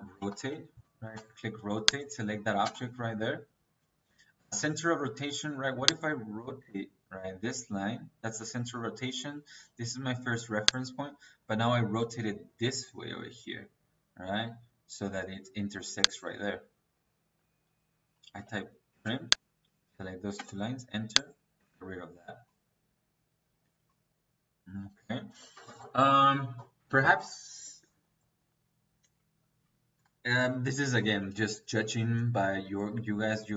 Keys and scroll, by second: 0.0-0.9 typing, 2.5 space, 18.2 t, 18.5 r, 18.8 space, 20.2 space, 21.5 Escape.